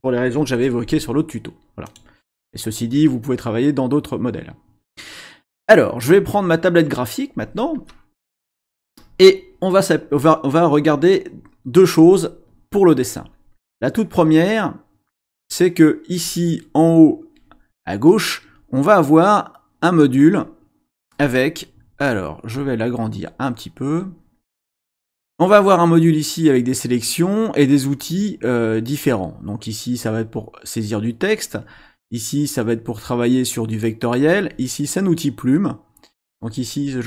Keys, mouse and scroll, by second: 1.9 click, 13.8 click, 22.5-25.1 drag, 30.0 click, 31.6 click, 34.2 click.